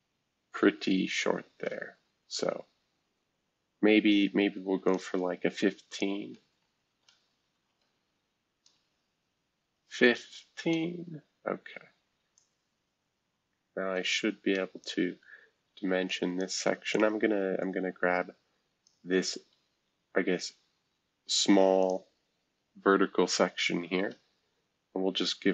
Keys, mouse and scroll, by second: 0.4 scroll down 4, 1.1 scroll down 4, 1.8 ctrl+z, 1.8-3.5 ctrl+scroll down 1, 4.8-6.9 shift+drag, 6.9-9.6 typing, 10.6 Return, 12.3-14.8 drag, 16.0 click, 16.9-18.9 drag, 20.6-21.8 scroll up 1, 21.8 click.